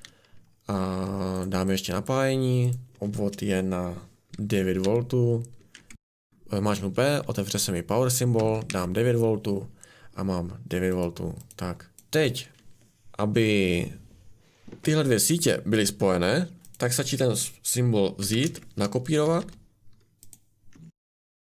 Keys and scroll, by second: 1.0 Escape, 4.8 p, 8.3-8.6 typing, 11.9 Escape, 18.1 ctrl+c, 18.4 ctrl+v, 19.0 r, 19.2 r, 20.7 Escape.